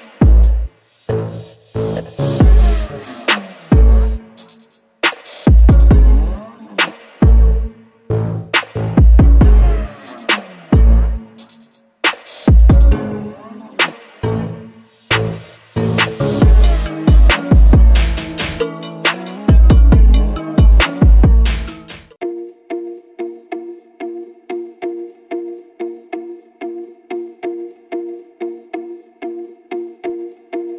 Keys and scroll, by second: 12.3 s, 14.6 s, 16.8 s, 19.3 space.